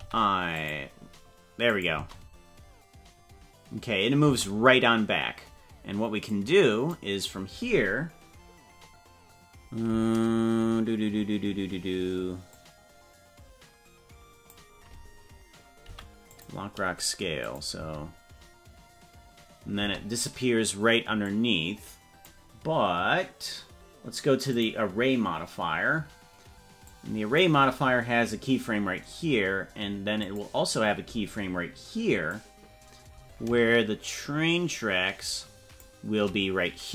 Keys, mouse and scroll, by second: 0.0 i, 1.7 click, 1.9 space, 4.2 space, 6.3 click, 8.8-9.2 scroll up 4, 12.6-14.5 drag, 15.9 i, 17.5 click, 17.7 space, 19.9 space, 21.3-22.3 drag, 24.5 click, 27.0 click, 30.2 click, 32.4-36.0 drag.